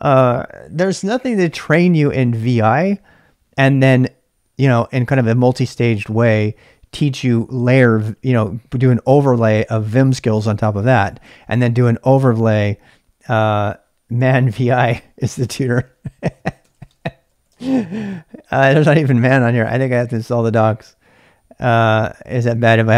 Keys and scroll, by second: 15.8-17.9 typing.